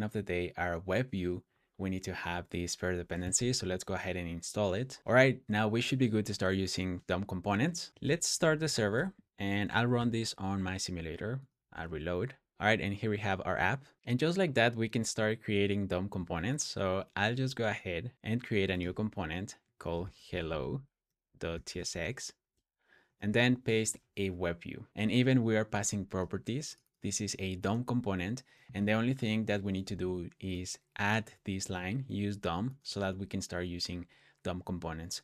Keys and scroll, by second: 7.6-12.7 typing, 20.3-22.9 typing, 23.1 super+v, 35.1 super+s.